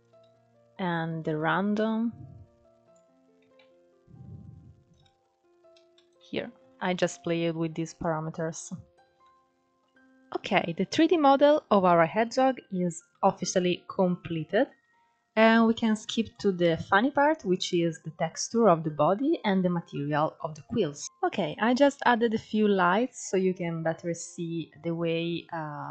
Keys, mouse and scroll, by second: 2.7 ctrl+z, 4.3-5.9 drag, 5.9 ctrl+z, 8.5-13.6 shift+middle drag, 13.6-14.4 scroll down 1, 14.4-15.0 scroll up 2, 15.0-16.1 middle drag, 16.1-16.5 scroll down 2, 16.5-17.3 middle drag, 17.3-17.9 scroll up 1, 17.9-19.6 middle drag, 19.6 scroll down 1, 19.9-21.0 middle drag, 23.4-23.9 scroll up 2, 25.6-25.9 shift+middle drag.